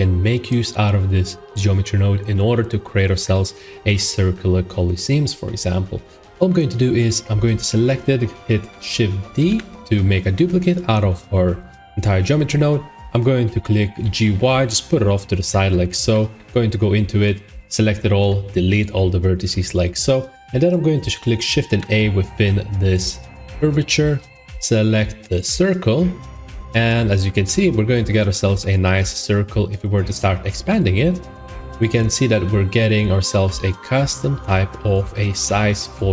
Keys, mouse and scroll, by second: 2.3 middle click, 2.5 middle click, 3.2 middle click, 3.5 middle click, 3.7 middle click, 4.0 middle click, 6.2 middle click, 6.2 click, 7.0 click, 13.9 g, 14.1 y, 15.4 click, 16.0 shift+middle click, 16.3 Tab, 17.1 typing, 18.1 Delete, 18.7 click, 25.5 click, 26.7-27.3 scroll, 27.8 shift+middle click, 27.9 middle click, 28.1 middle click, 28.5 middle click, 28.7-29.1 shift+scroll, 29.1 shift+middle click, 29.6 middle click, 30.6 s, 33.2 click, 34.8 click, 35.3 shift+middle click, 35.4 middle click, 35.4 middle click, 35.6 scroll, 35.8 shift+middle click.